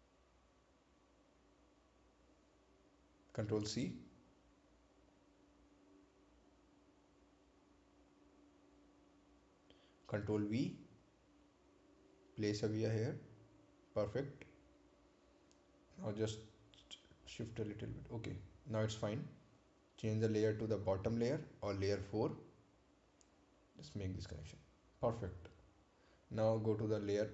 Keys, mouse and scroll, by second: 3.1 click, 5.1 ctrl+c, 7.2 click, 9.9 ctrl+c, 10.7 click, 12.1 scroll up 1, 13.2 ctrl+v, 16.4-21.2 drag, 26.6 scroll down 1.